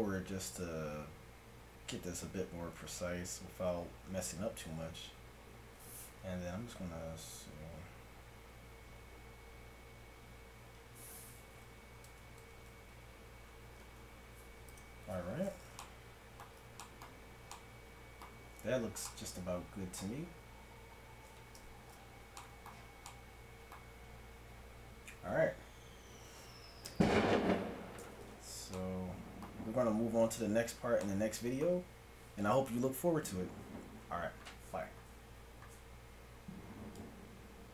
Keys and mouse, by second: 20.9 middle click, 21.6 KP_1, 27.1-28.7 middle drag.